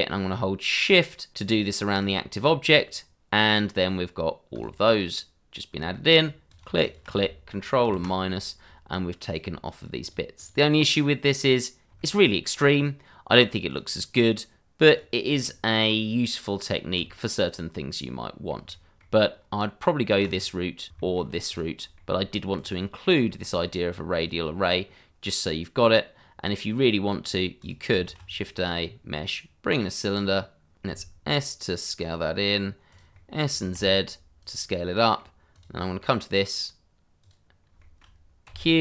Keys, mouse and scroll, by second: 2.0 click, 4.5 click, 5.1 middle click, 6.5 click, 7.8 ctrl+KP_Subtract, 9.2 click, 10.4 double click, 11.0 scroll up 1, 11.9 shift+middle click, 12.2 shift+middle click, 12.7 click, 13.2 scroll down 1, 13.6 click, 14.0-14.9 scroll down 1, 14.9 click, 17.0 h, 17.3 scroll down 1, 17.6 middle click, 19.4 shift+middle click, 19.7 scroll up 1, 20.4 click, 21.4 scroll down 1, 21.7 shift+middle click, 22.2-22.5 scroll up 1, 22.5 click, 23.2 shift+middle click, 24.2 click, 24.8 scroll up 1, 27.2 click, 27.7 double click, 28.0 shift+a, 30.1 click, 30.8 s, 33.1 middle click, 33.7 z, 34.4 click, 34.8 middle click, 35.5 click, 35.8 middle click, 37.2 click, 37.8 shift+middle click, 38.4 q.